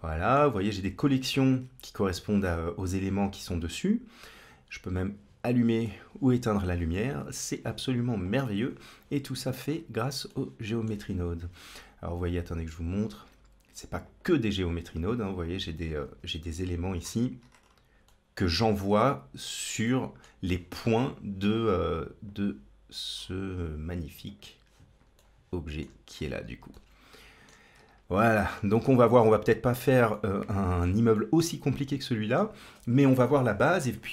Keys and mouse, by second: 2.8-4.2 drag, 4.8-7.0 drag, 10.1 middle click, 12.8 click, 13.9 click, 15.3 click, 16.1 KP_Decimal, 18.0 middle click, 19.8 shift+middle click, 22.1 click, 24.1 click, 25.0 shift+middle click, 26.8-27.3 shift+middle drag, 28.0 shift+middle click, 28.6-29.7 middle drag, 30.1 shift+middle click, 31.1-32.2 middle drag.